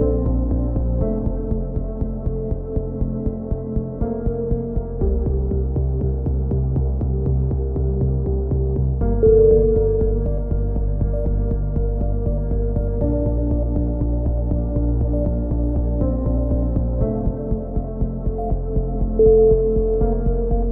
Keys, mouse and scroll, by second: 0.8 z, 1.0 Tab, 1.6 KP_3, 1.8 z, 2.8 click, 3.8-5.4 middle drag, 9.5 middle click, 10.1-11.4 right drag, 11.4-13.0 drag, 13.8 right click, 14.2 click, 15.9 a, 16.1 middle click, 16.3 z, 16.7 Tab, 17.2 click.